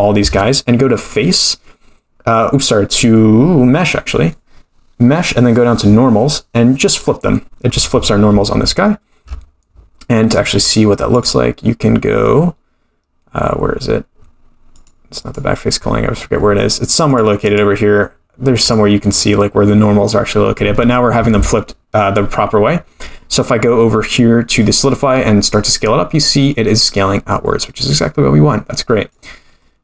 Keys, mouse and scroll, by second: 1.0-7.0 drag, 10.4-11.1 scroll down 1, 11.1 scroll down 3, 11.1-17.2 drag, 17.4 click, 21.3 Tab, 22.3-24.3 scroll up 3, 24.6-29.2 drag, 29.6-29.8 middle drag.